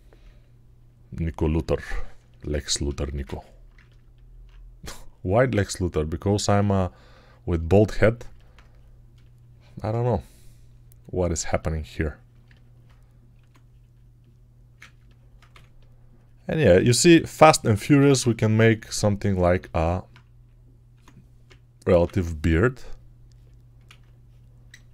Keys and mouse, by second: 9.0 shift+click, 9.8-11.4 alt+right drag, 10.0-11.3 alt+drag, 11.4 shift+click, 12.2-16.8 alt+right drag, 12.3 alt+click, 13.2 1, 14.6 alt+click, 15.4 3, 17.2-18.0 typing, 20.3 alt+q, 20.8 1, 21.3 [, 21.8 [, 22.5 [, 23.8 ctrl+z.